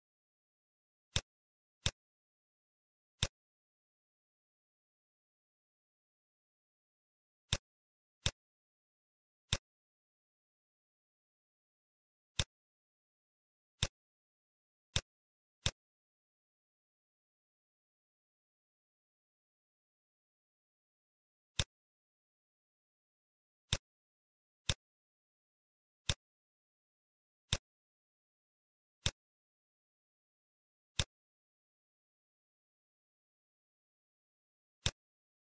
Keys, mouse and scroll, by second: 1.1 click, 2.4 shift+a, 9.4 click, 10.3-10.7 scroll up 2, 10.7 middle click, 12.2 click, 14.9 click, 14.9 shift+a, 15.5 click, 19.0 scroll up 2, 19.6-20.3 scroll down 4, 20.4 ctrl+x, 20.4 click, 20.7 shift+a, 26.2 click, 29.0 click, 34.7 click.